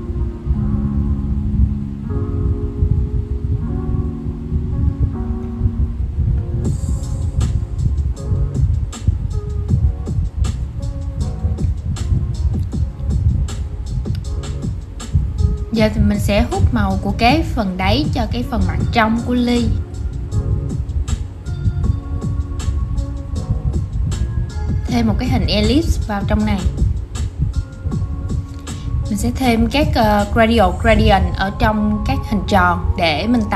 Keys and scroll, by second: 21.4 super+v.